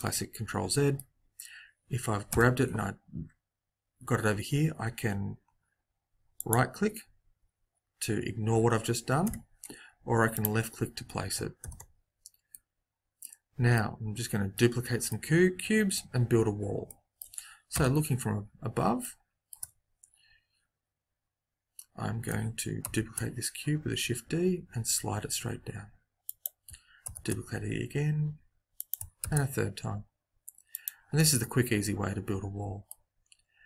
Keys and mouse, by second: 2.2 g, 9.2 g, 11.6 ctrl+z, 17.6 KP_7, 22.8 shift+d, 27.0 shift+d, 29.2 shift+d, 31.1 middle click.